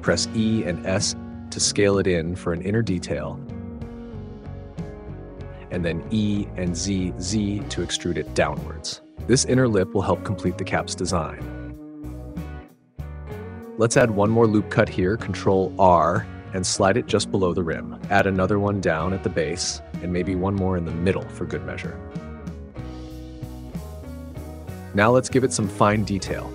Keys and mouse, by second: 0.4 s, 4.3 click, 5.7 e, 6.4 z, 9.7 click, 12.9 ctrl+r, 13.9 click, 16.1 click, 17.1 ctrl+r, 17.6 click, 19.5 click, 22.2 ctrl+r, 22.6 click, 25.6 middle click.